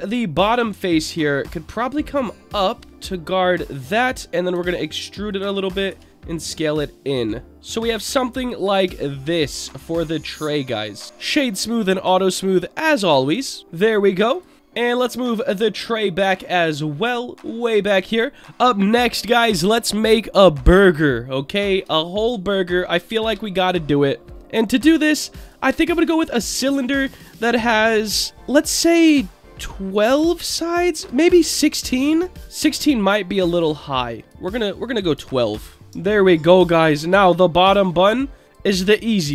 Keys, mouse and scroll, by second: 2.0-3.7 drag, 4.5 e, 5.3 click, 5.9 s, 7.5-8.7 middle drag, 7.5 click, 8.8 Tab, 9.3-11.0 middle drag, 11.0 click, 11.0 right click, 11.6 click, 12.9 click, 13.3 click, 13.6 scroll down 3, 13.7-14.3 scroll up 1, 14.3 click, 14.3-14.6 scroll up 2, 14.6-15.4 scroll down 1, 15.4 click, 15.4 scroll down 1, 17.0 click, 20.0-21.4 middle drag, 21.4-21.9 scroll up 2, 21.9 shift+middle drag, 22.4-23.1 scroll up 1, 23.2 shift+a, 27.1-32.4 drag, 34.1-35.7 drag, 35.9 Tab, 36.4 click, 37.3-38.5 drag, 38.8 middle click.